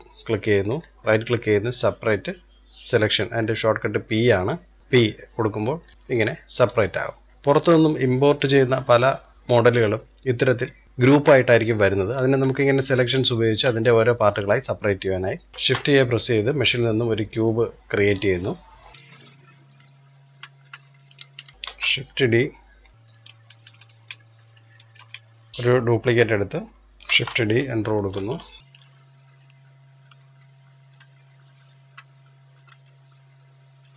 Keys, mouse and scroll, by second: 0.5 right click, 6.0 middle click, 6.6-7.1 scroll down 1, 7.1-8.0 middle drag, 8.0-10.3 drag, 10.6 click, 10.8-11.9 middle drag, 11.9-12.4 scroll up 1, 12.4-15.4 shift+middle drag, 15.4 scroll down 1, 15.5 shift+a, 17.9-18.3 scroll up 1, 18.3 shift+middle click, 19.1 s, 20.7-21.2 scroll down 2, 21.2 shift+middle click, 21.5 shift+d, 23.4 shift+r, 23.6 shift+r, 24.0 middle click, 24.9 shift+d, 29.2 click, 30.1 middle click, 30.6 click, 30.9 middle click, 31.3 click, 32.2 click, 32.6 middle click, 33.0 click, 33.8-33.9 middle drag.